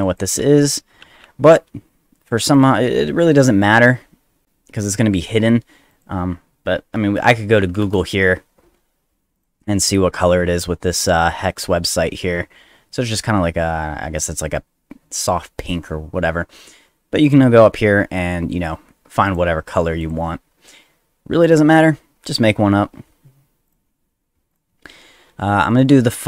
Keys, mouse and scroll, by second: 0.1 click, 0.4 ctrl+c, 1.0 ctrl+c, 2.5 click, 5.9 click, 7.7 v, 7.8 Return, 9.3 click, 17.2 click, 19.2 click, 20.0 click, 21.5 click, 23.6 click, 24.5 click.